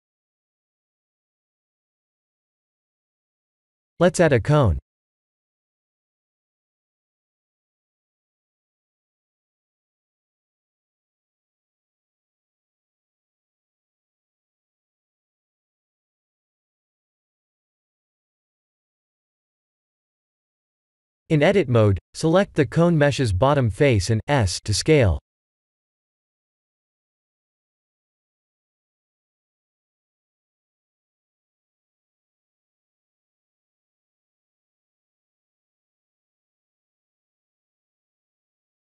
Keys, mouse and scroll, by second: 0.1 g, 1.1 click, 1.4 Tab, 2.0 middle click, 2.5 shift+z, 3.0 middle click, 4.5 KP_1, 5.1 shift+a, 9.6-10.1 scroll down 9, 10.3 s, 11.7 g, 12.9-14.5 scroll up 12, 14.5 s, 17.7 g, 20.6 middle click, 21.4 Tab, 21.7 3, 22.0 click, 22.5 middle click, 23.3 shift+z, 23.7 KP_1, 24.6 s, 28.0 shift+z, 28.4 Tab, 28.8 click, 29.4 click, 29.7 right click, 30.5 click, 30.9-31.8 scroll down 10, 31.8 middle click, 33.9-34.5 scroll up 9, 35.1 click.